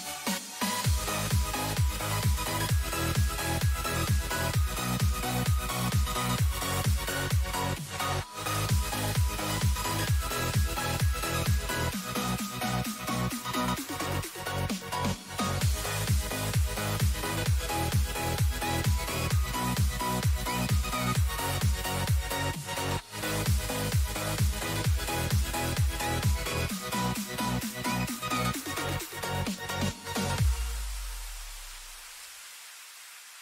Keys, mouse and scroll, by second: 2.1-7.1 middle drag, 7.1 KP_3, 10.1 n, 11.7-13.4 middle drag, 16.9-18.9 middle drag, 18.7 g, 21.1-24.2 middle drag, 24.2 Tab, 25.9 a, 26.6 a, 27.1 a, 27.5 Tab, 29.1 g, 29.8 click, 32.8-33.4 middle drag.